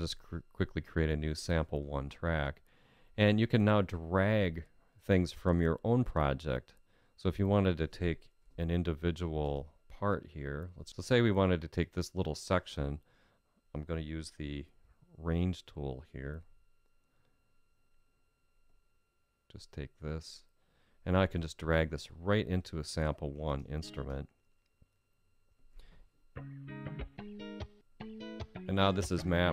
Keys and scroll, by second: 8.1 Home.